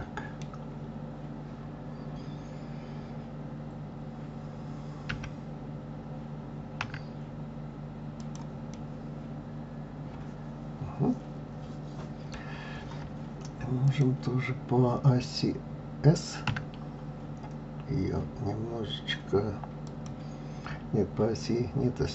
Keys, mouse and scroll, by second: 0.8 scroll down 2, 8.7-11.9 middle drag, 12.8 scroll up 1, 13.9 click, 16.5 s.